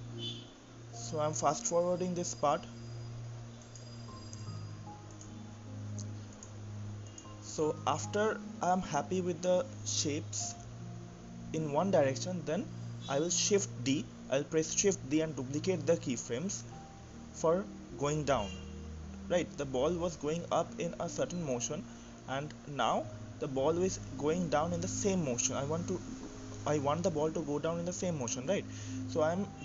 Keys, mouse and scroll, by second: 3.7 click, 4.0 ctrl+z, 4.1 click, 4.2 click, 5.1 click, 5.4 shift+middle click, 6.3 click, 6.9 click, 7.4 click, 8.5 shift+d, 10.3-14.4 drag, 14.4 shift+d, 21.1-24.4 drag, 24.4 shift+d, 29.5 click.